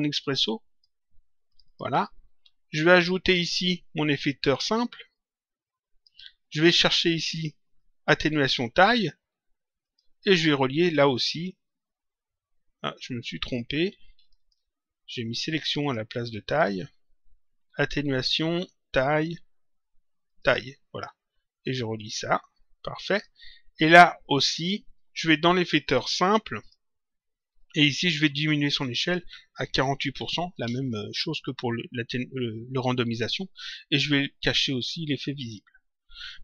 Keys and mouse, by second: 0.3 click, 2.7 click, 5.1 click, 7.1 click, 9.7 click, 11.0 click, 14.1 click, 15.5 click, 20.2 click, 21.9 click, 23.7 click, 25.8 click, 28.7 click, 30.5 Return, 35.3 click.